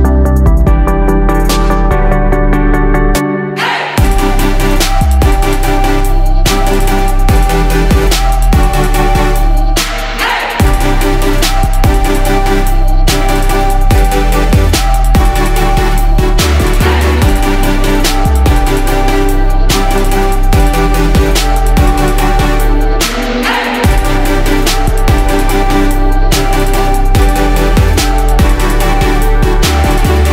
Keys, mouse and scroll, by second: 4.7 click, 10.5-28.0 ctrl+drag, 28.5 shift+click.